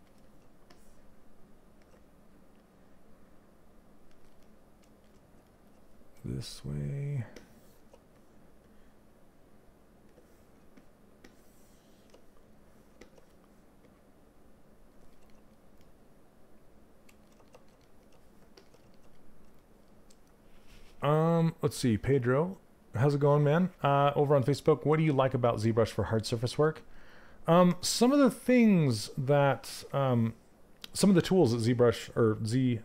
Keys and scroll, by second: 27.2 q.